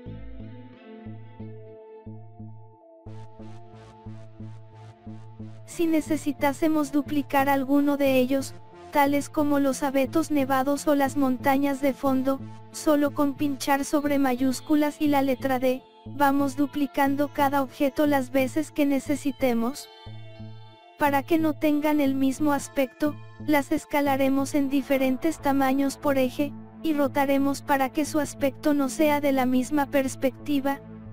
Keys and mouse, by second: 2.4-5.1 drag, 7.0 KP_7, 11.4 r, 15.5 g, 20.3 KP_0, 22.8-24.8 drag, 25.8-27.7 drag, 27.8-29.7 drag, 30.6 KP_7.